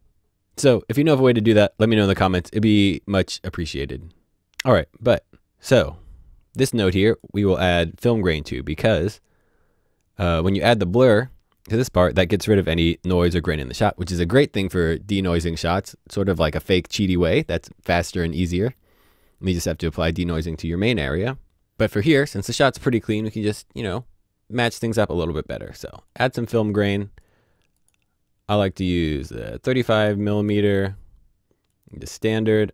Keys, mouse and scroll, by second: 4.5 click, 6.6 click, 26.0 click, 29.8-31.2 scroll down 1, 31.7 click.